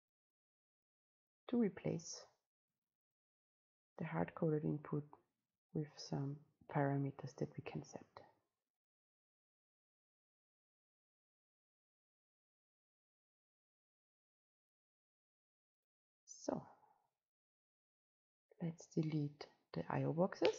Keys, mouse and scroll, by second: 3.5-17.0 drag, 17.0-20.0 scroll down 2, 20.4 click.